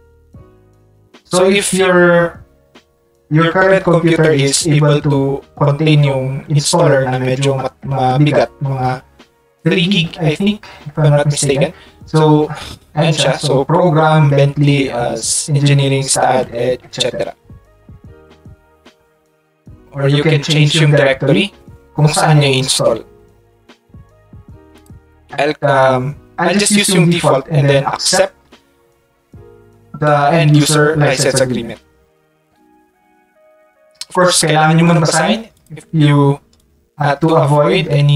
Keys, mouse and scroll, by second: 24.7 click, 35.5 ctrl+click, 36.6 ctrl+click.